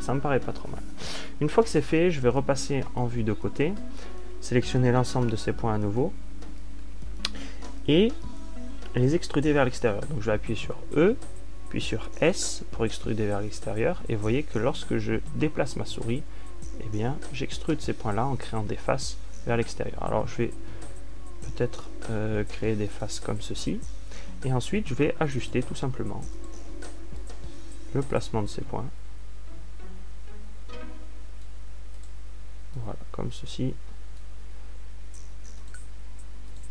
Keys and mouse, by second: 2.3-4.5 middle drag, 2.3 a, 4.5 ctrl+alt+q, 8.1 l, 12.7 e, 24.5-26.5 drag, 26.5 a, 34.4-35.8 middle drag.